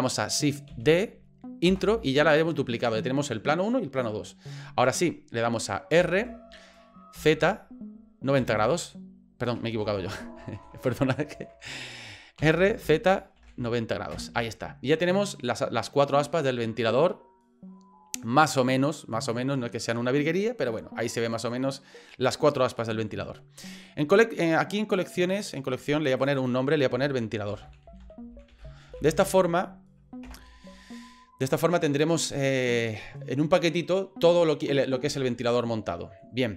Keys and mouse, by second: 0.7 shift+d, 6.0 r, 11.3 ctrl+z, 12.4 r, 16.3-20.0 middle drag, 20.7-21.8 middle drag, 22.8 middle click, 26.2 click, 26.3-30.8 drag, 35.6 middle click.